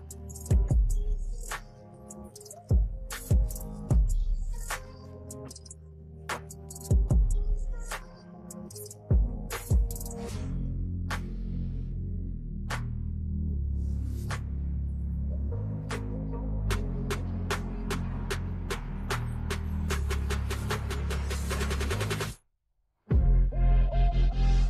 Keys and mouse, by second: 0.9 shift+click, 1.8 ctrl+g, 2.7 click, 4.6 m, 4.8 g, 5.4 Return, 16.1 click, 18.2 click, 19.4 right click, 20.1 right click, 20.8 click, 22.2 click, 23.3 t, 24.0 click.